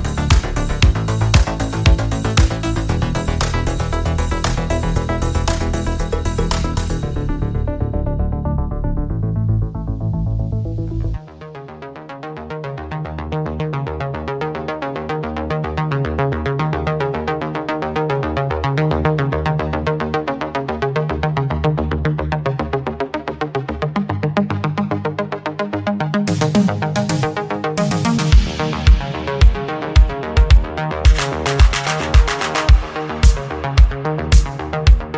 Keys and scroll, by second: 10.2 ctrl+z.